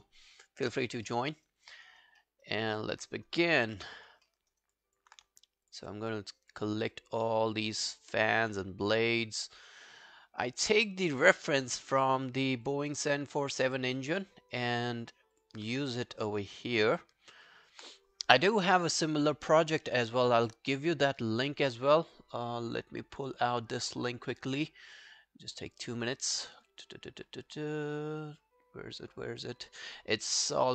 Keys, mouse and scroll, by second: 1.1 alt+middle click, 1.4 alt+right click, 1.6 alt+click, 1.9 alt+right click, 2.2 alt+middle click, 2.5 alt+right click, 2.7 alt+click, 4.5 alt+right click, 4.8 alt+click, 6.1-9.8 shift+click, 15.9 alt+click, 26.0 right click, 26.6 scroll down 1, 28.0-28.5 scroll down 19.